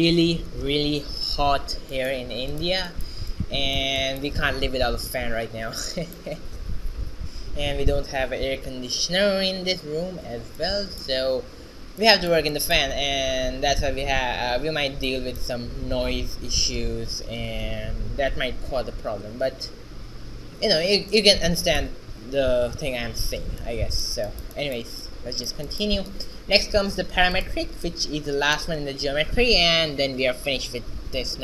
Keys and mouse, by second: 0.0 shift+z, 25.9-27.8 drag, 30.9 shift+z.